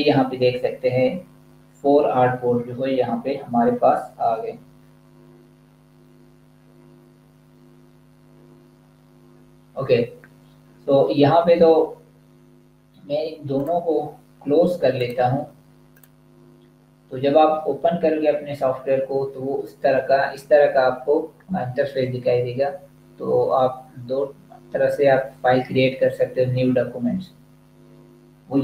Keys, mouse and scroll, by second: 13.5 click.